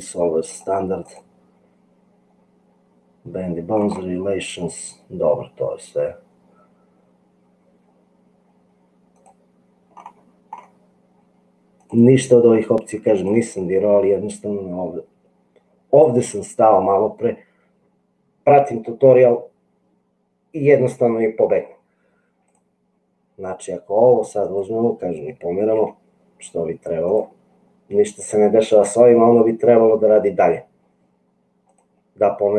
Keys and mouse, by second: 0.4 click, 13.2 click, 25.8 g, 31.7 click.